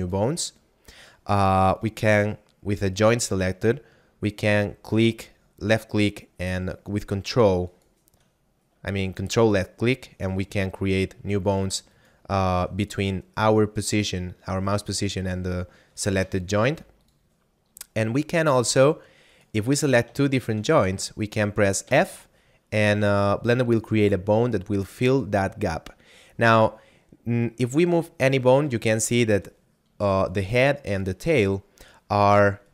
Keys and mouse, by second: 0.0 click, 2.8 right click, 7.3 ctrl+click, 9.4 ctrl+click, 10.3 ctrl+click, 11.9 ctrl+click, 15.9 right click, 16.7 x, 16.9 click, 18.3 right click, 18.5 x, 18.7 click, 19.3 right click, 20.3 shift+right click, 21.7 f, 27.6 right click, 30.1 right click.